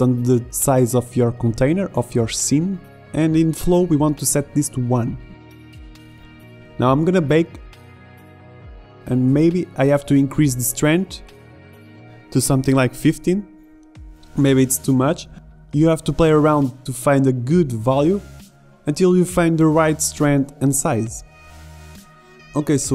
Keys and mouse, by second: 1.2-4.8 middle drag, 5.4 middle click, 5.9 click, 6.6 middle click, 7.3 click, 7.8-9.0 drag, 9.1 alt+a, 12.0 a, 12.9 middle click, 13.1 click, 13.8 right click, 14.1 click, 15.0 alt+a, 15.3 alt+a, 15.4 click, 15.9 click, 17.4 alt+a.